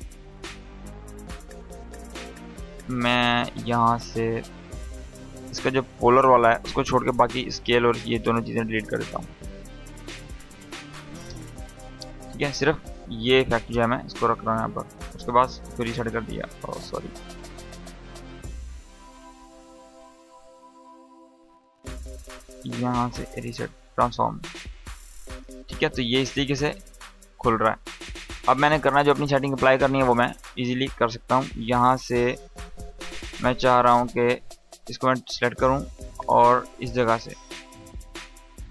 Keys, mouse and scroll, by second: 0.1-2.3 drag, 10.8 Delete, 11.6-12.3 click, 12.0 space, 13.7 click, 16.1 ctrl+z, 18.9 click, 19.7 u, 19.9 u, 22.6-27.2 drag, 30.0-34.4 drag, 38.6 r.